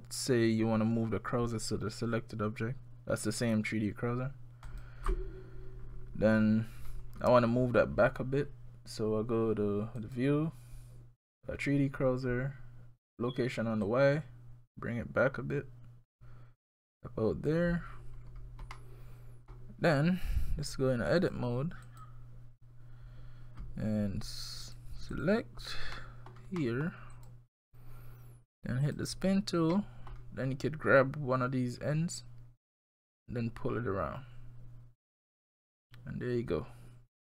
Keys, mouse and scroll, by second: 6.7 scroll up 2, 7.1-9.1 scroll down 2, 10.0 click, 13.9 click, 18.2-18.7 scroll up 3, 18.7 middle click, 21.2 click, 24.7 click, 25.1 click, 26.0 middle click, 26.6 middle click, 27.1 click, 28.8 click, 29.7 middle click, 33.1 click.